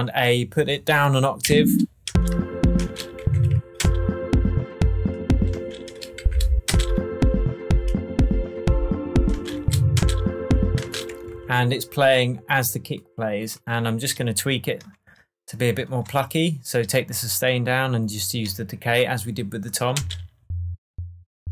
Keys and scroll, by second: 1.4 shift+Down, 2.0 shift+space, 2.7 space, 3.2 shift+Down, 3.7 shift+space, 5.5 space, 6.2 shift+Down, 6.6 shift+space, 9.3 space, 9.6 shift+Up, 9.9 shift+space, 11.3 shift+Tab, 19.9 space.